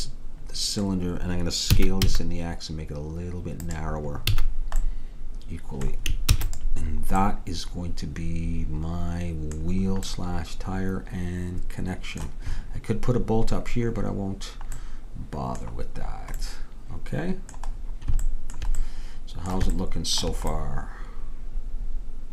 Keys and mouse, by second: 2.1 s, 4.4 a, 6.4 ctrl+s.